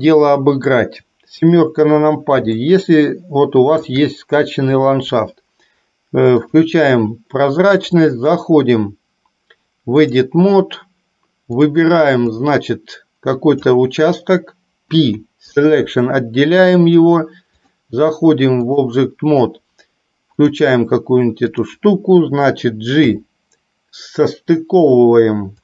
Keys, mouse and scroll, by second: 2.6-4.1 shift+middle drag, 8.2-10.4 drag, 11.7 click, 12.7-13.8 drag, 17.7-19.0 drag.